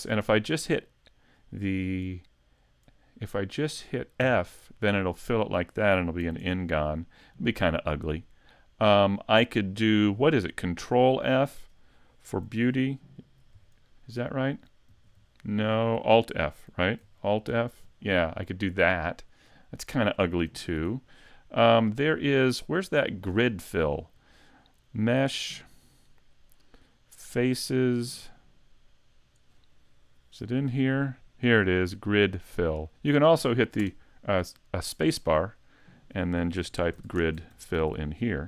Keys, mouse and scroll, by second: 4.2 f, 6.3 z, 6.8 middle click, 14.9 ctrl+f, 17.5 alt+f, 18.2 middle click, 20.8 z, 21.7 scroll down 1, 22.0 scroll up 1, 22.3 middle click, 23.1 shift+middle click, 23.6 middle click, 24.9 click, 33.8 space, 37.9 l.